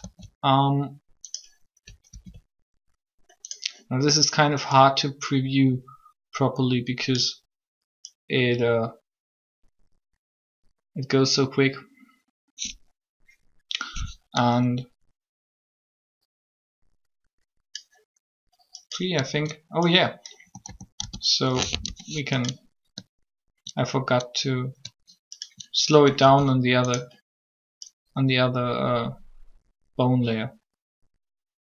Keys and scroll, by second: 2.1 alt+a, 20.4-21.6 typing, 26.2 alt+shift+a.